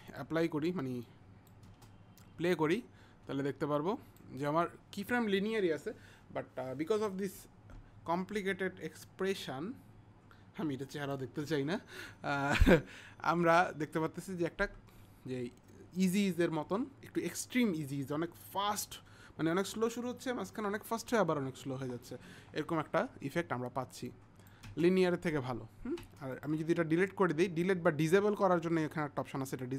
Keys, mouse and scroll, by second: 0.1 click, 1.1 click, 3.8 click, 9.1 click, 24.1 click, 26.4 click, 27.6 click.